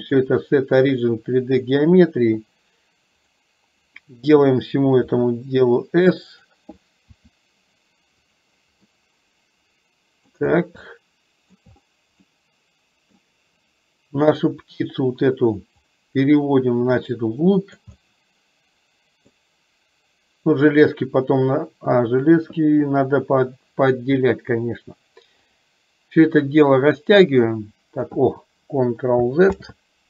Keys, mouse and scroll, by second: 0.1-1.8 drag, 3.2 click, 5.2 s, 7.2 s, 8.9-10.3 middle drag, 10.9-11.7 shift+middle drag, 12.3-13.2 middle drag, 15.8-17.8 drag, 18.1 scroll up 1, 18.2-19.3 middle drag, 20.6 click, 27.1-28.2 drag, 29.4 ctrl+click, 29.7 ctrl+z.